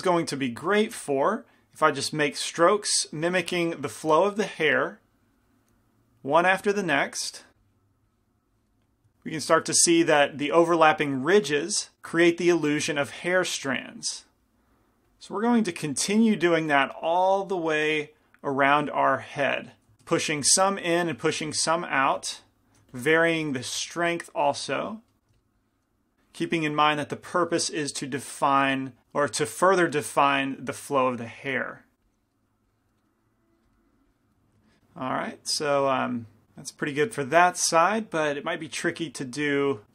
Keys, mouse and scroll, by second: 0.7 f, 2.0-3.8 drag, 4.7 f, 4.9-10.6 drag, 9.3-11.9 middle drag, 12.4 middle click, 15.2-18.5 drag, 18.0-19.9 middle drag, 18.9-19.9 drag, 20.2 shift+f, 21.1 shift+f, 21.8 middle click, 22.2 f, 23.0 f, 23.9-25.4 drag, 25.4 f, 25.6 click, 26.2-28.0 drag, 27.6-32.0 middle drag, 27.6 right click, 30.6-35.1 drag, 33.1 middle click, 34.7-36.4 middle drag, 36.8-39.1 middle drag, 38.3-39.8 drag.